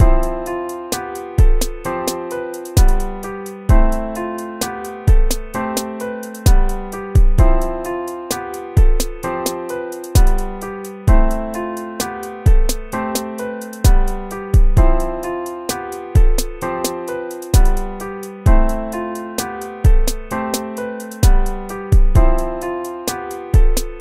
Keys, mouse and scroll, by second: 0.1 BackSpace, 0.3 ctrl+-, 0.9 ctrl+-, 1.3 ctrl+-, 5.4 ctrl+z, 6.2 ctrl++, 6.4 ctrl++, 8.5 ctrl+-, 16.7 ctrl+-, 23.4 ctrl+-.